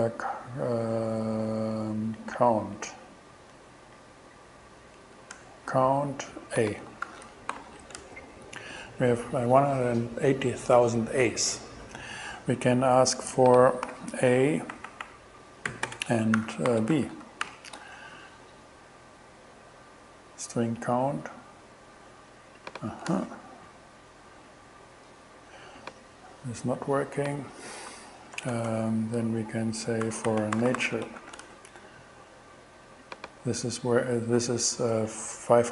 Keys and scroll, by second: 2.2 Down, 2.8 Up, 4.0 Down, 4.8 Up, 5.4 Return, 7.1 shift+2, 7.6 alt+shift+6, 8.0 alt+shift+Return, 8.8 shift+Return, 13.9 alt+8, 14.8 alt+Right, 15.7-17.5 typing, 17.9 alt+shift+Return, 18.7 shift+Return, 23.1 shift+Return, 28.4-31.7 typing.